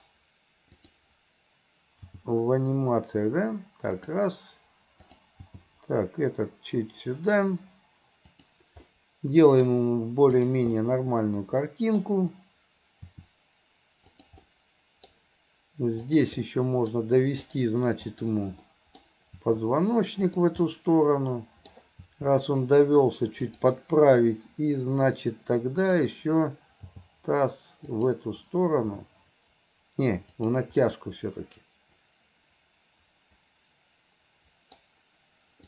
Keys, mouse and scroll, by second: 0.0-0.8 scroll down 1, 0.8 click, 2.1 g, 5.5 g, 8.9-10.4 middle drag, 10.4 click, 10.8-12.0 middle drag, 13.1 r, 14.5-15.1 middle drag, 16.1-16.5 drag, 16.5-17.0 middle drag, 17.4 click, 18.1 click, 18.7 middle click, 19.3 r, 20.7-21.8 middle drag, 22.0 r, 25.8 click, 26.9 g, 28.9 g, 30.9 scroll up 1, 31.0-34.8 middle drag.